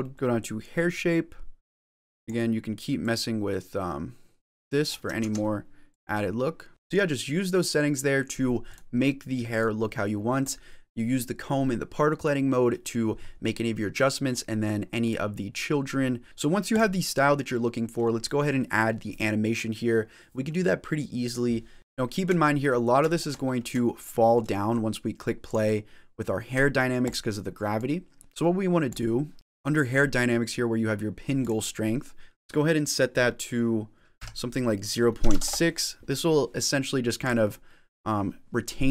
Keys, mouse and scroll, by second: 0.1 click, 0.1-0.8 scroll down 9, 2.1 click, 2.9 click, 5.3 ctrl+z, 5.8 click, 6.7-8.2 scroll up 10, 8.6 click, 9.4 click, 10.3 click, 13.3 middle click, 14.9 click, 16.2 shift+middle click, 16.6 click, 17.0 middle click, 21.8 middle click, 21.8-22.6 scroll up 9, 22.0 shift+middle click, 22.6 middle click, 23.0-23.7 shift+scroll down 6, 23.7 shift+middle click, 24.4 middle click, 25.8 click, 27.1 click, 27.8 click, 28.2 middle click, 28.2-28.7 scroll down 1, 28.7-29.3 click, 31.3 click, 37.1 click.